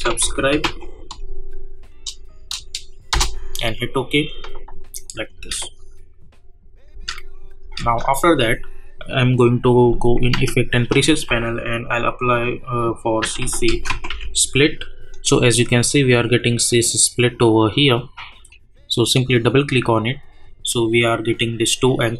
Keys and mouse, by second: 0.0-1.1 typing, 3.1 Return, 5.0 click, 5.3 space, 9.9 click, 10.3 ctrl+a, 12.9-14.5 typing, 18.9 click.